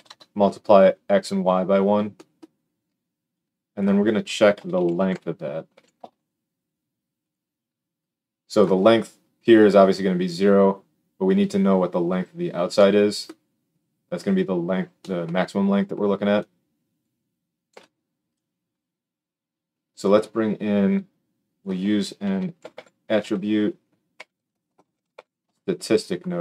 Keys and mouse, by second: 7.3-7.9 middle drag, 7.9-18.3 drag, 17.6 g, 18.3-20.1 middle drag, 20.1-26.4 drag, 22.7 t.